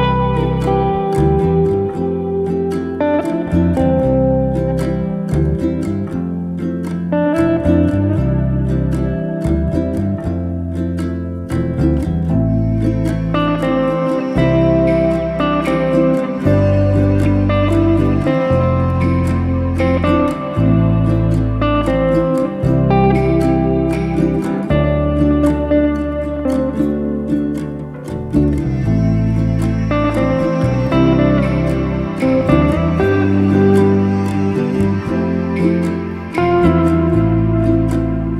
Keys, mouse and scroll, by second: 1.1 click, 1.3 ctrl+a, 4.8 click, 5.2 ctrl+a, 6.6 click, 6.9 ctrl+a, 7.8 click, 8.2 ctrl+a, 9.4 click, 9.9 ctrl+a, 10.9-11.9 middle drag, 11.9 alt+z, 12.1-13.4 middle drag, 13.4-14.2 scroll up 1, 14.2 alt+z, 14.5 scroll up 2, 14.8 click, 15.4 click, 16.2 g, 18.2 scroll down 1, 18.4 middle click, 18.8 Tab, 19.3 alt+z, 19.4 scroll down 1, 19.7-20.7 middle drag, 20.7-21.9 scroll up 1, 21.9-23.1 drag, 23.1 Tab, 23.4-24.9 shift+middle drag, 24.9 click, 25.2-26.7 middle drag, 27.1 a, 27.9 middle click, 28.6 click, 29.4 3, 29.5 click, 29.9 shift+click, 30.0 shift+click, 30.2 shift+click, 30.4 shift+click, 30.7 shift+click, 30.9 shift+click, 31.6 shift+click, 31.7 shift+click, 31.9 shift+click, 32.1 shift+click, 32.3 shift+click, 32.5 shift+click, 32.7 shift+click, 33.0 shift+click, 33.2 shift+click, 33.4 shift+click, 33.6 shift+click, 33.8 shift+click, 34.1-34.4 scroll up 1, 34.4-35.5 shift+middle drag, 35.9 shift+click, 36.3 shift+click, 36.5 shift+click, 36.6 shift+click, 36.8 shift+click, 37.0 shift+click, 37.2 shift+click, 37.5 shift+click, 38.0 shift+click.